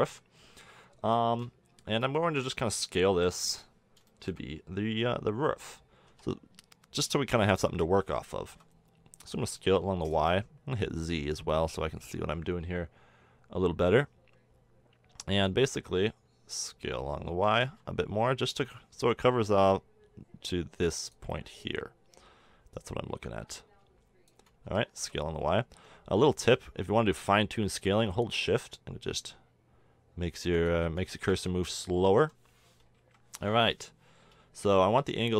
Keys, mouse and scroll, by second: 3.1 KP_7, 6.1 s, 10.1 z, 11.5 click, 17.4 s, 22.7-24.6 drag, 24.6 s, 31.1-32.1 middle drag, 32.2 z, 33.0 KP_1, 34.6 r.